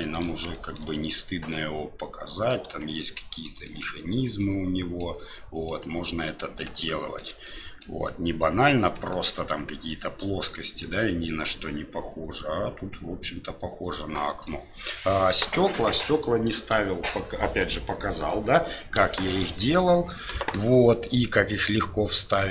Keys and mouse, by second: 0.5 shift+middle drag, 1.5-2.5 middle drag, 2.8-3.1 shift+middle drag, 3.4 shift+middle drag, 4.3-5.0 middle drag, 5.6-6.4 middle drag, 6.8-7.1 shift+middle drag, 7.4-7.8 middle drag, 9.1 shift+middle drag, 10.4-10.8 middle drag, 11.6-14.4 middle drag, 21.1-22.5 middle drag.